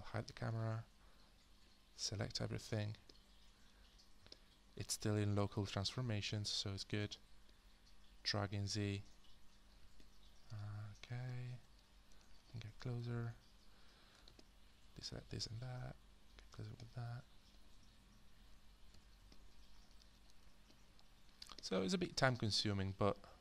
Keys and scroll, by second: 0.2 h, 18.9 f.